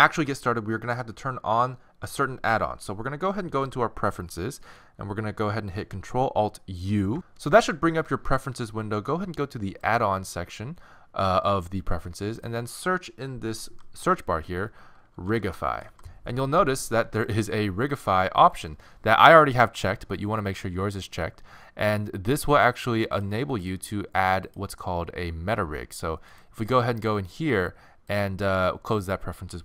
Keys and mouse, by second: 28.1-29.6 drag.